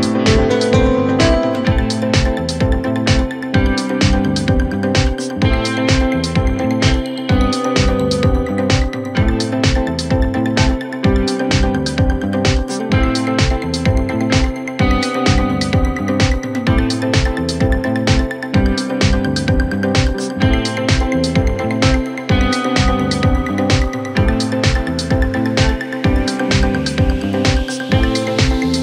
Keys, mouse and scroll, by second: 0.8 click, 1.2-2.0 scroll up 1, 2.0 KP_Add, 2.3 KP_Add, 2.4 KP_Add, 2.6 KP_Add, 2.9 KP_Add, 3.3-3.7 KP_Add, 4.0 KP_Add, 4.2 KP_Add, 4.6 KP_Add, 5.6 KP_Subtract, 8.0 s, 12.4 KP_1, 13.1-13.5 scroll down 3, 13.5 Tab, 16.0-16.6 scroll up 2, 16.6-18.7 scroll down 2, 19.1-19.6 KP_8, 20.4-20.7 scroll up 1, 20.7 Tab, 21.7 click, 22.6 1, 23.3 click, 24.7-25.1 scroll down 1, 25.1 g.